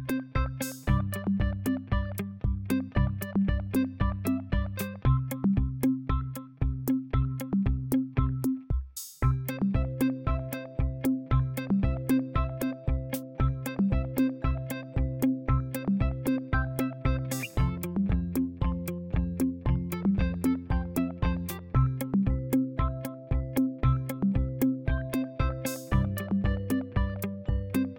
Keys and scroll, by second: 2.9 ctrl+=, 3.8 ctrl+=, 4.2 ctrl+=, 4.6 ctrl+=, 5.0 space, 21.6 ctrl+-, 22.1 ctrl+-, 22.4 ctrl+-, 24.9 typing, 25.5 ctrl+a.